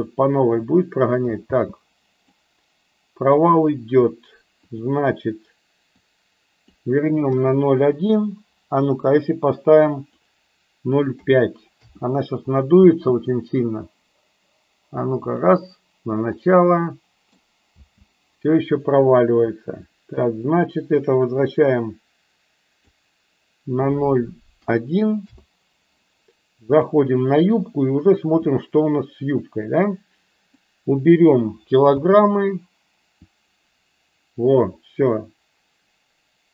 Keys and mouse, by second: 1.9 space, 2.3-3.3 middle drag, 4.6-12.1 drag, 12.7 space, 15.4 click, 16.5-17.7 middle drag, 17.9 space, 20.1-25.5 drag, 30.4 click, 32.0 space.